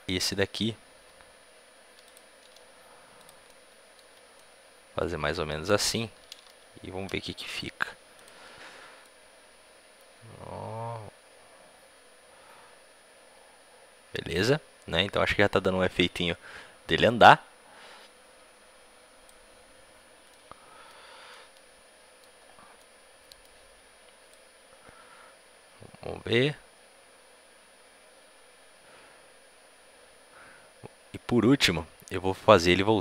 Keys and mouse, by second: 0.0-1.7 right drag, 0.9 g, 2.4-4.8 drag, 2.4 s, 6.1 a, 6.2 a, 8.1 i, 8.9-10.8 drag, 20.1 middle click, 20.6 click, 20.7 middle click, 20.8 click, 20.8 middle click, 20.9 click, 21.3-22.3 middle drag, 23.1-24.2 middle drag, 24.2-26.0 drag.